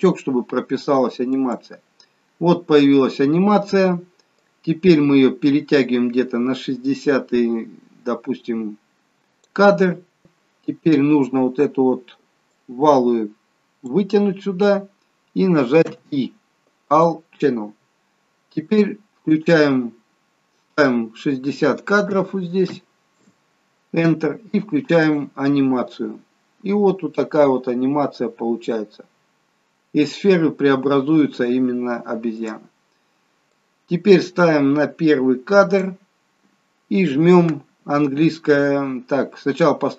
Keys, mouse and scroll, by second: 1.6 click, 4.7 click, 10.2 ctrl+z, 12.7 click, 16.0 i, 20.9 click, 25.2 click, 32.6 click, 33.8 click.